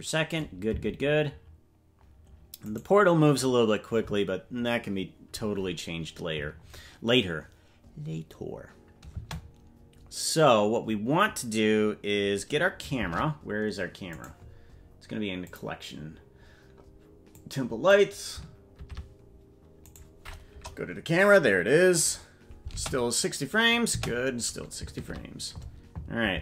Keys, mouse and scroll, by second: 0.7 space, 2.8 right click, 13.0 shift+`, 15.5-19.0 drag, 20.5 KP_0, 22.7 space, 24.9 space, 24.9 shift+`.